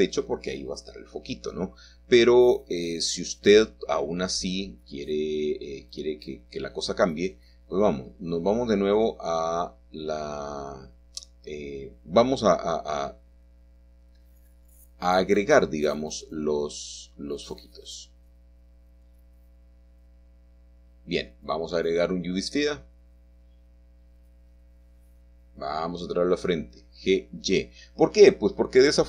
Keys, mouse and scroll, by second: 2.5 middle click, 3.0-4.5 scroll up 1, 5.0-5.9 scroll down 1, 5.9-6.5 scroll down 1, 6.5-6.9 scroll up 1, 6.9-11.0 middle drag, 6.9-7.8 scroll down 1, 8.7-9.6 scroll up 1, 12.2-13.6 shift+middle drag, 14.4-15.6 middle drag, 14.4 7, 16.1-17.8 drag, 17.0-18.1 right drag, 18.4-19.2 scroll up 2, 19.2-20.3 shift+middle drag, 21.9 click, 22.9-24.3 middle drag, 24.5 g, 26.1 y, 27.6 click, 28.2-29.0 scroll up 1, 28.9 middle click.